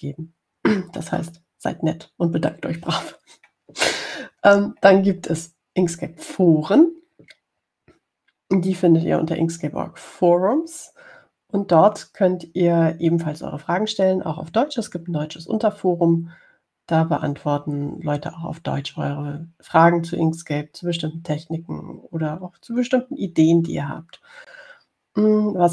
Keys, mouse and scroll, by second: 6.1-6.6 scroll down 2.